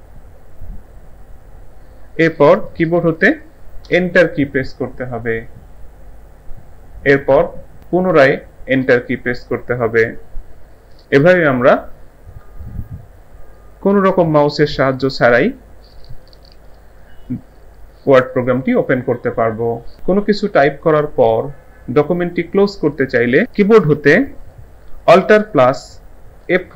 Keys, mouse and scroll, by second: 0.7 typing, 3.9 Return, 8.9 Return, 26.4 alt+F4.